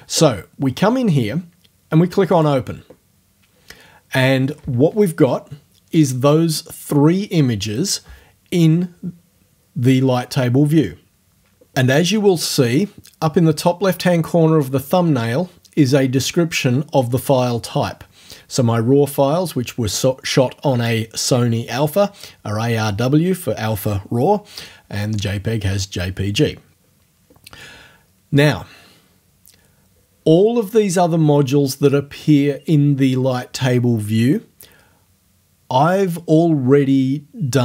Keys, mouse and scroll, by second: 2.4 click.